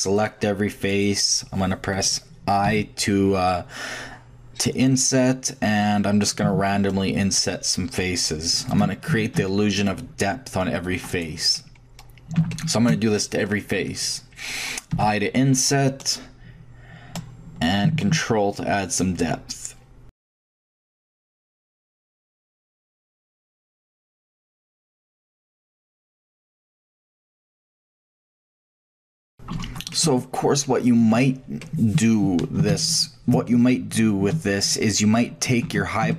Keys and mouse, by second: 0.1-0.6 drag, 0.7 click, 0.9-2.1 middle drag, 1.9 click, 2.6 i, 9.1 a, 9.8-11.5 middle drag, 11.9 middle click, 12.1-12.4 middle drag, 14.9 i, 20.0 shift+click, 20.2 i, 20.9 a, 22.6 i, 24.4 a, 25.1 i, 27.4 a, 27.5 click, 27.7 shift+click, 28.1 click, 28.2 shift+click, 28.4 i, 29.1 a, 35.6 ctrl+shift+Tab.